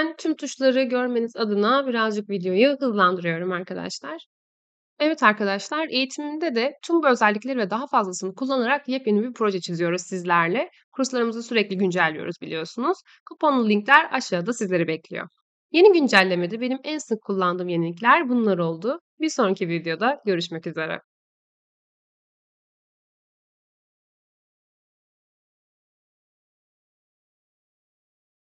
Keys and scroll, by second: 0.3 ctrl+z, 1.3 ctrl+z.